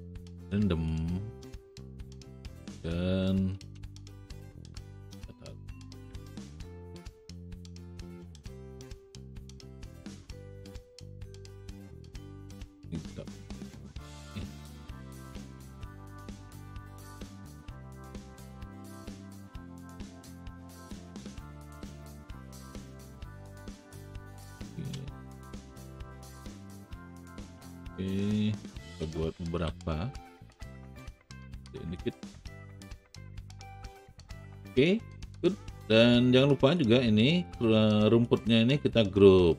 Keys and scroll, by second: 2.7 w, 12.2 r, 19.0 w, 25.4 alt+shift+w, 29.6 r.